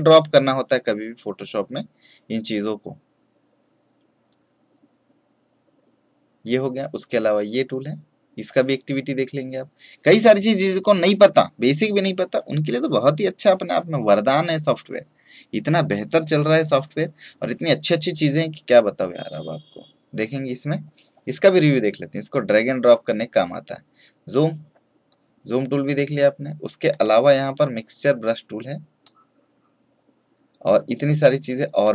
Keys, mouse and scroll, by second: 26.8-31.9 drag.